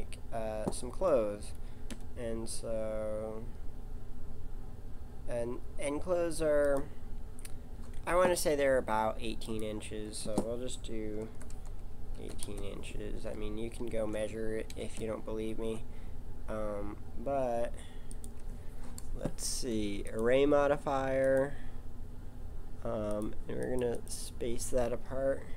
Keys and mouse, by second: 0.9 s, 9.4 click, 14.7 g, 20.0 click, 22.0-23.1 middle drag.